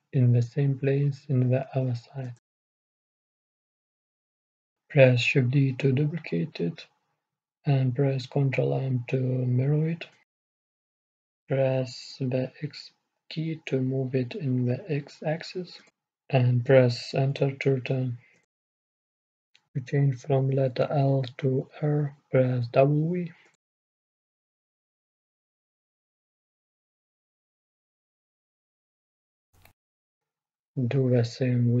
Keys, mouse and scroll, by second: 1.6 shift+d, 10.4 ctrl+m, 16.3-18.3 drag, 21.6-23.1 middle drag, 23.1 w, 26.3-28.5 middle drag, 29.4-31.8 middle drag.